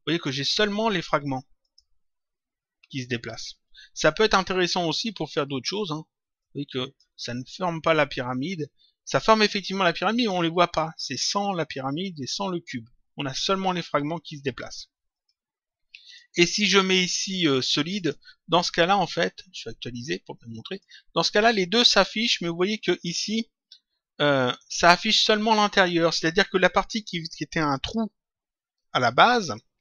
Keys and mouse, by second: 0.8 click, 6.4 click, 10.1 click, 15.1 click, 17.9 click, 19.8 click.